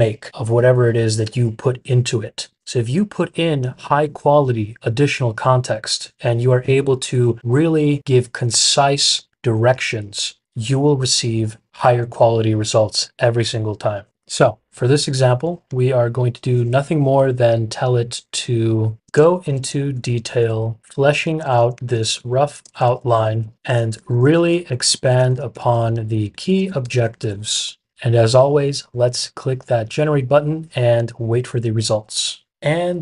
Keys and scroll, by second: 17.2 typing, 18.7-27.9 typing.